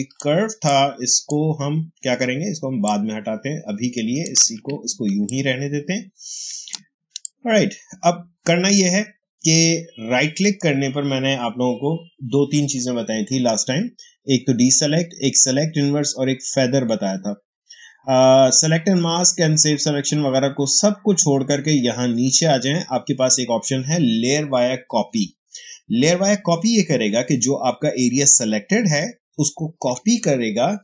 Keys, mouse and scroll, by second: 5.1-10.3 ctrl+drag, 10.3 right click.